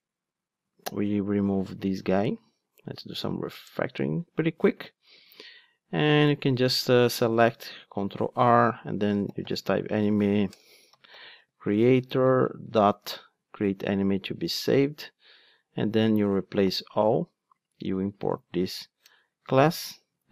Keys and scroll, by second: 7.6 super+r, 12.7 super+v, 18.6 alt+Return, 19.9 ctrl+Tab.